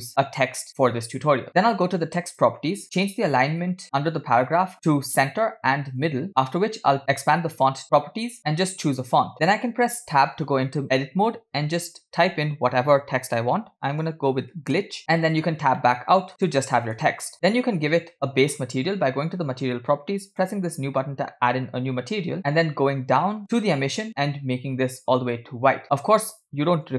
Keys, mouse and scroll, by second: 0.4 shift+middle click, 3.0 click, 5.2 click, 6.2-7.2 drag, 7.3-8.0 drag, 9.0-10.1 drag, 11.2 Tab, 11.9 BackSpace, 12.2 BackSpace, 14.3-15.5 typing, 15.5 Tab, 16.3 middle click, 16.5-16.9 scroll up 1, 16.9 middle click, 18.3 click, 21.2 click, 22.7-23.3 scroll down 1, 23.3-23.9 scroll down 3, 23.9-24.4 scroll down 4, 24.4 click.